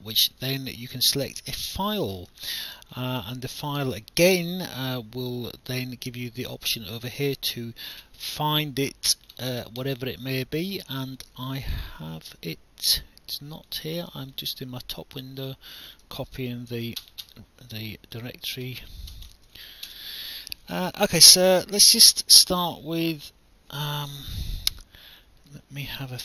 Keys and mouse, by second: 1.5 click, 7.2 click, 11.1 click, 13.4 click, 15.2 click, 16.8 ctrl+c, 18.2 click, 19.1 BackSpace, 19.7 ctrl+v, 19.9 Return, 19.9 KP_Enter.